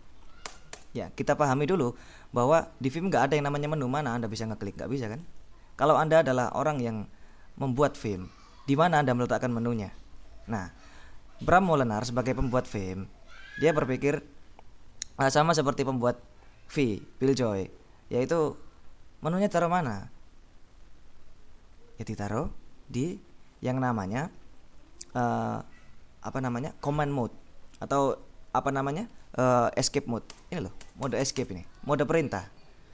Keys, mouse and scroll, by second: 0.5 Escape, 3.9-5.9 drag, 6.5 click, 30.4 Escape.